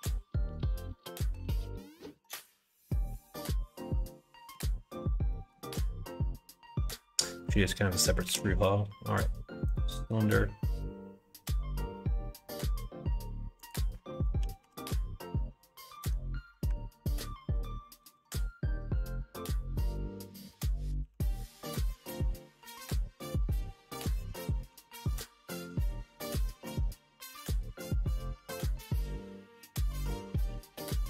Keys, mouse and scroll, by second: 3.5 middle click, 5.3 middle click, 8.2 shift+a, 11.4 s, 14.4 g, 16.7 alt+z, 17.5 KP_1, 18.0 KP_3, 19.4 s, 20.8 g, 22.6 g, 24.7 s, 26.4 g, 28.1 g.